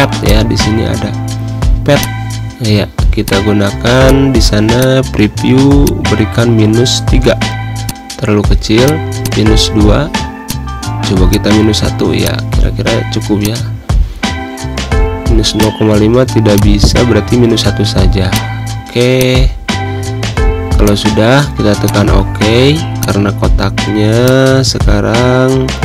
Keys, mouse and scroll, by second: 1.7 click, 6.5 typing, 7.6 click, 9.6 2, 10.1 click, 11.4 1, 11.9 click, 13.9-14.5 typing, 15.3-17.5 drag, 17.5 1, 18.1 click, 19.6 -, 20.6 click.